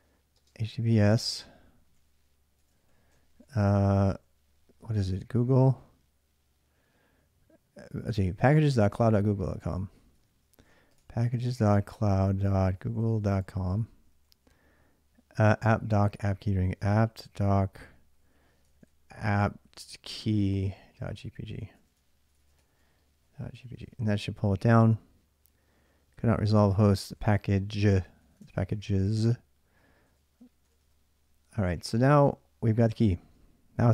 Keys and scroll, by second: 0.1-5.5 typing, 9.4 ctrl+a, 9.7-14.6 typing, 15.8 ctrl+a, 16.3-18.7 typing, 18.7 ctrl+a, 19.6 ctrl+a, 19.8-24.0 typing, 26.8 ctrl+a, 27.0 ctrl+a, 28.0 ctrl+a, 28.1-32.1 typing.